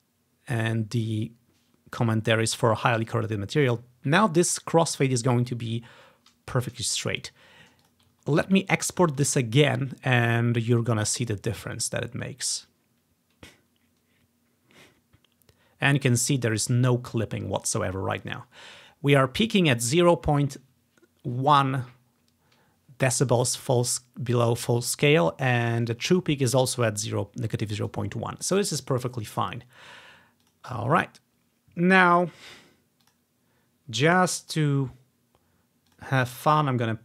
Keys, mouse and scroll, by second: 3.7 click, 7.5-7.8 ctrl+scroll down 2, 7.9 click, 8.3-9.4 ctrl+drag, 8.3 scroll down 1, 9.4 alt+e, 12.6-14.1 drag, 30.5-33.1 drag, 33.2-34.6 drag, 34.7 click, 35.6-36.0 scroll down 2, 36.0 click, 36.5-37.0 drag.